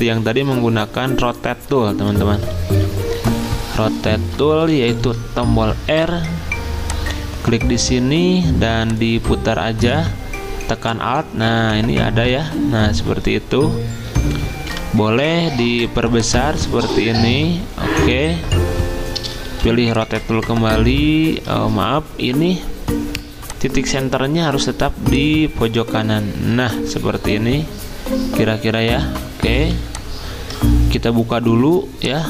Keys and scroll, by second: 2.4 Right, 2.9 Right, 3.1 Right, 5.0 r, 14.7 v, 19.5 r, 21.5 ctrl+z, 29.6 v, 31.3 ctrl+alt+2.